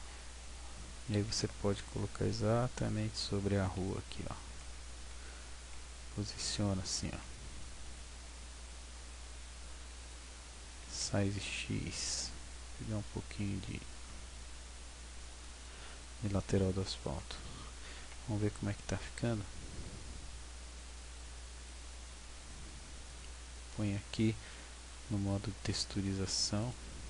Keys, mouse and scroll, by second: 0.1 ctrl+w, 1.2 g, 2.9 click, 3.1 scroll, 4.8 w, 5.8 w, 7.3 g, 10.9 s, 18.5 w, 21.7 click, 23.8 Tab, 25.3 click.